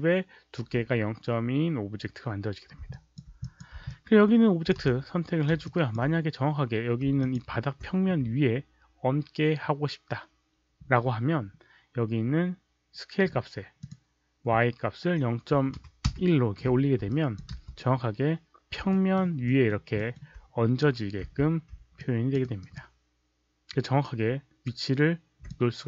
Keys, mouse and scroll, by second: 2.9 alt+click, 3.3 click, 3.8 alt+click, 4.7 w, 5.6 alt+click, 7.1 alt+click, 13.8 click, 15.7 KP_1, 16.0 Return, 17.0 alt+drag, 17.5 space, 17.9 Return, 17.9 alt+click, 17.9 KP_1, 17.9 KP_Decimal, 18.8 alt+middle click, 19.4 alt+middle click, 19.9 alt+middle click, 21.9 alt+click, 22.3 alt+right click, 22.7-25.4 alt+drag.